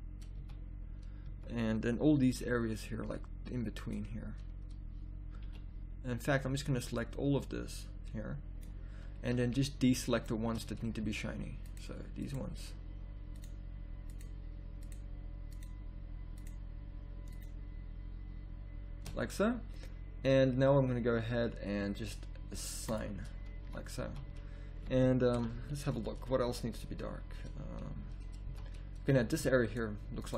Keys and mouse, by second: 0.4 z, 1.2 z, 2.3 b, 5.4 b, 23.6 a, 24.1 z, 25.3 z, 28.5 z.